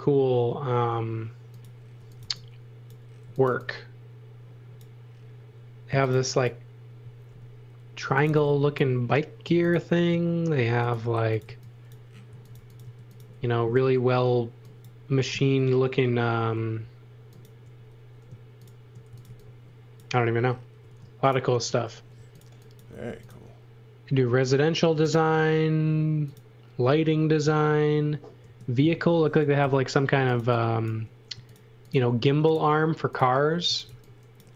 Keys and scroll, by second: 1.7-4.0 typing, 5.6-9.4 typing, 10.9-13.0 typing, 18.8-19.8 typing, 20.8 space, 22.1 x, 22.8 m, 28.5 space, 29.6 super+z, 29.9-30.9 typing, 33.4-34.4 typing.